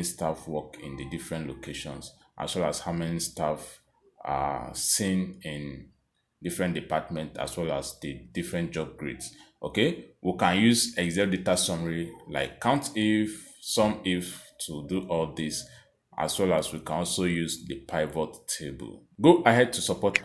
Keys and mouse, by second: 1.4 click, 2.5 click, 9.4 click, 10.3 click, 11.2 click, 12.4 click, 13.3 click, 14.5 click, 16.5 click.